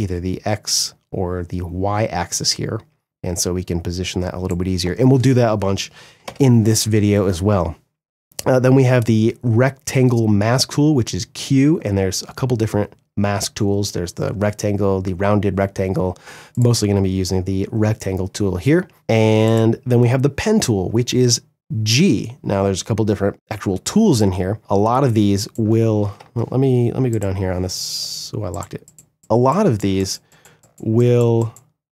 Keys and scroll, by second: 5.8 v, 18.9 Delete, 25.7 ctrl+z.